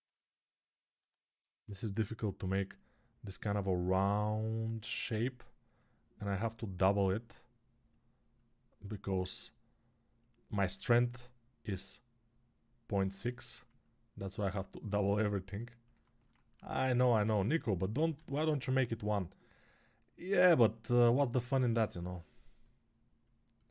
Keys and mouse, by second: 18.0 alt+q.